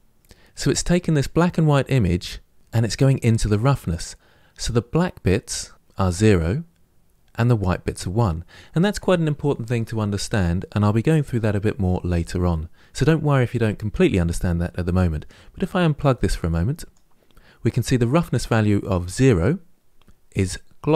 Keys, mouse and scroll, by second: 16.7-20.9 drag.